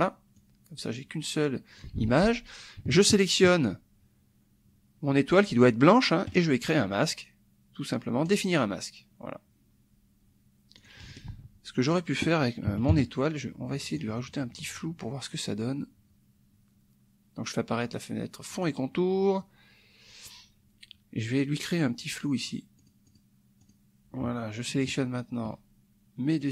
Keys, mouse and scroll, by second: 0.4-1.9 drag, 1.9 ctrl+z, 2.9 shift+click, 6.3 right click, 8.2 click, 10.8 click, 11.3 ctrl+z, 11.9 click, 12.7 KP_Subtract, 12.9 KP_Add, 13.9 click, 14.3 click, 18.5 click, 22.4 click, 22.8 click, 23.6 click, 24.9 shift+click, 26.4 right click.